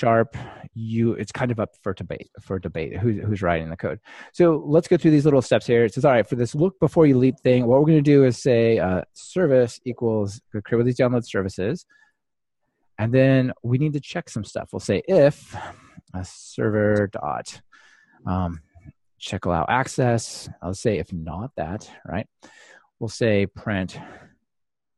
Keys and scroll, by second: 10.7 Return, 18.6 Return.